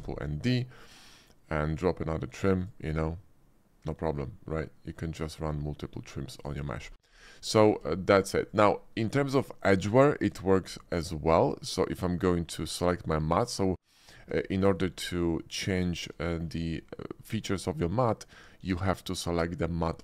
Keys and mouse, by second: 0.0 d, 7.6 Tab, 7.6 drag, 8.0 shift+middle click, 8.5-9.3 drag, 9.5 shift+click, 10.0 shift+click, 12.6-14.2 drag, 14.4 shift+click, 14.8 middle click, 16.2 shift+middle click, 19.1 click.